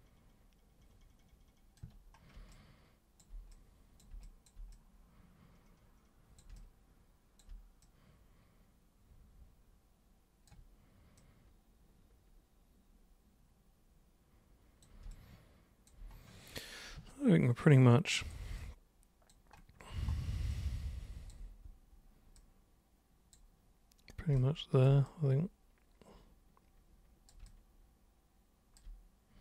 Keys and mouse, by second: 2.5 alt+super+click, 3.5 super+click, 4.2 alt+super+click, 4.7-6.4 super+drag, 6.6 alt+super+click, 7.9-10.5 super+drag, 11.2-14.8 super+drag, 15.1 alt+super+click, 17.1-18.3 super+drag, 18.6 alt+super+click, 20.6 alt+super+click, 22.4 super+click, 24.3 super+b, 24.4 super+click, 25.1-27.3 super+drag, 27.5-28.8 alt+super+drag.